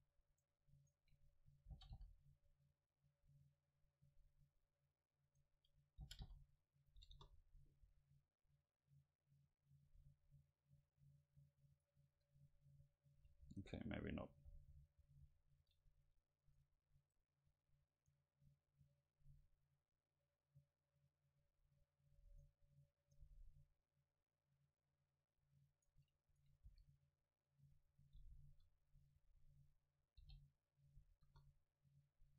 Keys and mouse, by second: 0.4 right click, 1.8 right click, 1.8 g, 3.1-4.9 drag, 3.3 middle click, 5.3 right click, 6.1 g, 7.0 click, 7.1 KP_0, 7.9 a, 11.8-13.7 right drag, 13.4 ctrl+z, 13.7 ctrl+z, 13.9 ctrl+z, 14.2 ctrl+z, 14.4 ctrl+z, 14.6 ctrl+z, 14.9 ctrl+z, 15.1 ctrl+z, 16.5-20.7 right drag, 22.4-28.5 right drag, 26.7 s, 27.9-30.0 drag, 28.5 KP_7, 30.3 g, 31.3 KP_0, 31.4-32.3 drag.